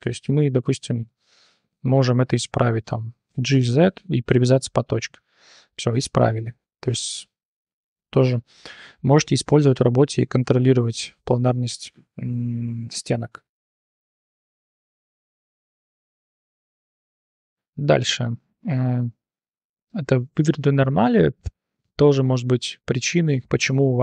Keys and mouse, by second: 3.3 g, 5.2 click, 5.6 click, 6.9 Tab, 11.9-12.4 drag, 13.8 /, 16.0 h, 16.4 click, 16.7 shift+drag, 16.9-18.0 drag, 18.9 click, 19.1 drag, 19.6 click, 23.0-23.3 drag, 23.5 click, 23.9-24.0 drag.